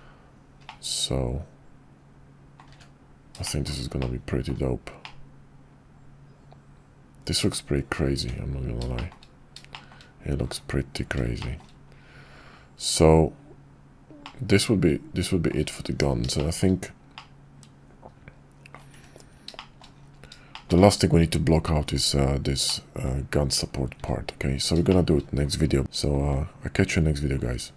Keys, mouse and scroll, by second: 0.6-2.6 middle drag, 3.4 shift+middle drag, 4.0-4.5 middle drag, 5.0-8.0 middle drag, 8.9 shift+middle drag, 9.7 shift+middle drag, 11.4 shift+middle click, 14.2-15.5 middle drag, 16.3 shift+middle click, 17.1-18.7 middle drag, 19.6 shift+middle drag, 20.5 shift+middle click, 22.6-23.0 middle drag, 24.9 shift+middle click, 25.8 middle drag.